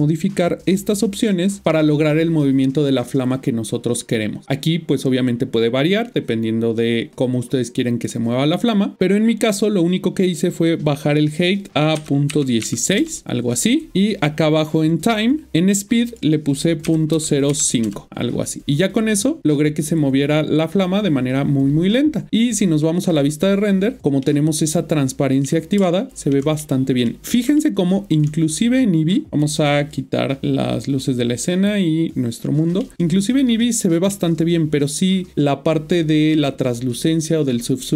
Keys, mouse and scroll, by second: 10.6 click, 11.9 click, 12.6 typing, 13.0 Return, 14.8 click, 16.1 click, 16.8-17.5 typing, 17.8 Return, 22.7 click, 24.2 middle click, 25.8 ctrl+middle click, 26.6 middle click, 27.6 shift+middle click, 30.7 click, 31.4 click, 32.8 middle click, 34.2 scroll up 1.